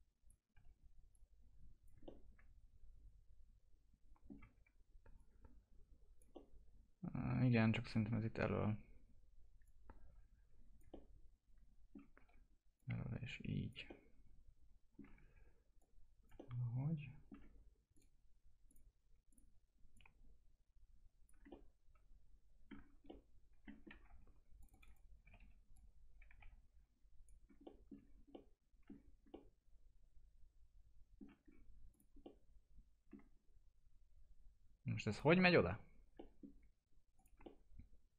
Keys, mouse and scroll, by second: 0.5 e, 1.1 click, 2.0-4.4 alt+middle drag, 4.4 w, 5.1 click, 6.3 alt+middle click, 8.2 w, 9.6 click, 10.8 alt+middle click, 12.1 e, 12.7 click, 13.8 alt+middle click, 15.1 w, 15.7 click, 16.3-17.9 alt+middle drag, 17.9-21.4 drag, 21.4 alt+middle click, 22.7 scroll down 1, 23.0 alt+middle click, 23.8 scroll up 1, 24.0 F3, 24.5 click, 25.2 e, 25.7 click, 26.4 F3, 27.3 scroll down 1, 27.6 alt+middle click, 27.9 scroll down 1, 28.3 alt+middle click, 28.9 scroll down 1, 29.2-31.4 alt+middle drag, 31.4 scroll up 1, 31.8 click, 32.2-35.0 alt+middle drag, 35.0 click, 36.1 middle click, 37.1 click, 37.4 alt+middle click.